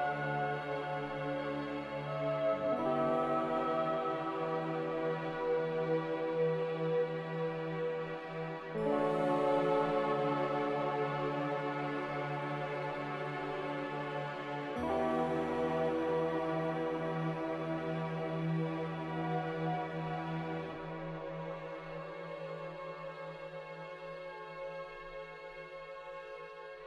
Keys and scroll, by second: 3.5 z, 4.6 Delete, 6.6-7.4 typing, 26.3 z.